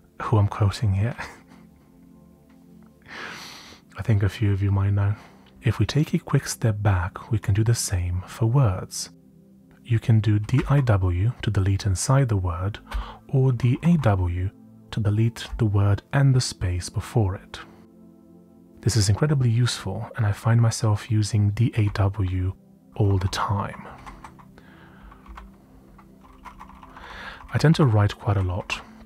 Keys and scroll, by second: 9.7-11.1 typing, 12.8-14.3 typing, 21.8-26.9 typing, 28.0-29.0 typing.